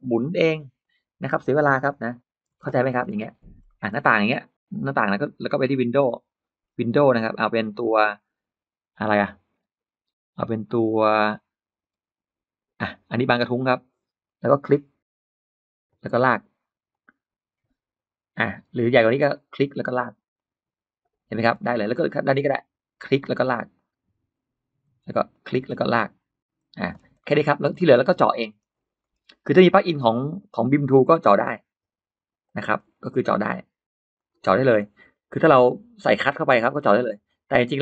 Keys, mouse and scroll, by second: 0.7 click, 1.1 middle click, 1.5 p, 1.7 click, 1.9 click, 2.3 middle click, 2.4 space, 2.7-3.4 scroll up 1, 3.0 Escape, 3.5 middle click, 5.0 click, 5.7 click, 6.5-7.1 scroll up 2, 7.3-7.6 scroll down 2, 8.8-9.1 scroll up 2, 9.4-10.9 scroll down 8, 11.1-11.4 scroll down 2, 11.7-12.0 scroll down 2, 12.7 click, 13.5 click, 14.1 scroll up 2, 15.7 click, 16.7 click, 18.0 scroll up 1, 18.7 Escape, 19.3 click, 20.2 click, 21.2-21.6 scroll down 1, 21.3 Escape, 21.7 middle click, 21.9-22.2 scroll down 1, 22.3-22.6 scroll up 1, 22.9 click, 23.6 click, 24.7 Escape, 25.1 click, 25.8 click, 26.6 space, 26.7-27.6 scroll down 4, 27.0 middle click, 27.6 middle click, 27.9-28.2 scroll up 2, 28.0 space, 28.3-28.7 scroll down 1, 28.7-29.0 scroll up 1, 29.3 click, 29.5 click, 29.6 click, 29.8 click, 30.2 middle click, 32.3 click, 32.6 middle click, 32.7 scroll up 2, 34.0 click, 34.3-34.6 scroll down 2, 34.9 scroll up 2, 35.1 middle click, 35.9 click, 36.3 middle click, 37.3 click, 37.7 middle click.